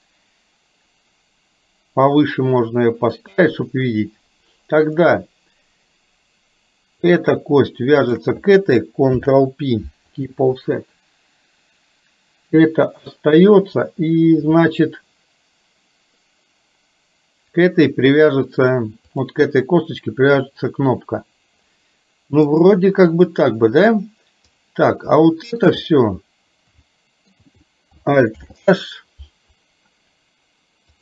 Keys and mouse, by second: 7.2 click, 9.2 ctrl+p, 19.2 click, 22.5 click, 25.2 shift+middle click, 26.9 shift+middle click, 28.4 alt+h.